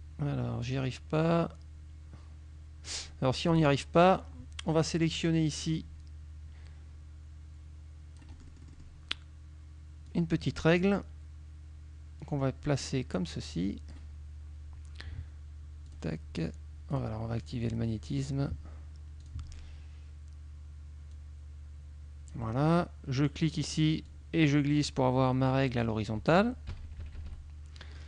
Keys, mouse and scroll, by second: 0.7-3.1 drag, 3.6 click, 5.8-9.0 drag, 10.1-11.1 drag, 12.3-14.2 drag, 16.0 click, 17.0 click, 17.8 click, 18.2 click, 19.3 click, 21.2-22.6 drag, 24.2-26.1 drag, 26.8 KP_Subtract.